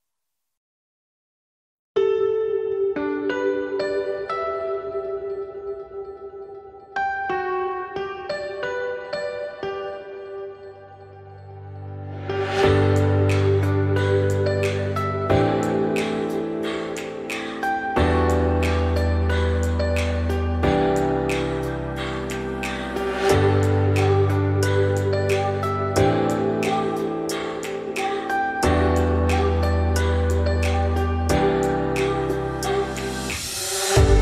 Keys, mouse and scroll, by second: 1.5 click, 2.5 click, 2.8 scroll down 4, 3.1-3.5 middle drag, 3.5-3.9 scroll up 2, 3.9-4.3 middle drag, 4.3-4.9 scroll up 2, 4.9-5.6 middle drag, 5.6-6.0 scroll up 2, 6.0 scroll down 2, 6.2-8.5 middle drag, 8.5 click, 9.2-13.3 drag, 14.0 `, 16.0 click, 16.3-16.7 shift+middle drag, 16.7 scroll up 2, 16.9 alt+x, 20.2-23.2 shift+drag, 23.2-23.6 scroll down 4, 23.6-24.3 scroll up 4, 24.3-25.8 shift+middle drag, 25.8 click, 27.3 click, 27.6 scroll down 3, 27.8-28.5 middle drag, 28.5 click, 29.1-30.0 middle drag, 30.0 click, 30.2-30.6 middle drag, 30.6-31.8 scroll up 3, 30.8 Tab, 31.8 middle click, 32.5 g, 34.1 Tab.